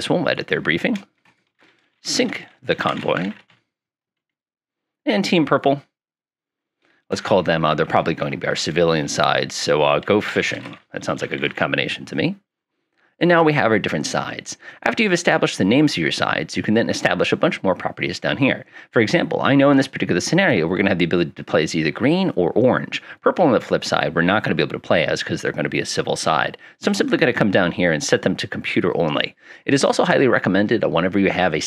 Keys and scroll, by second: 1.3-4.0 typing, 9.8-12.2 typing.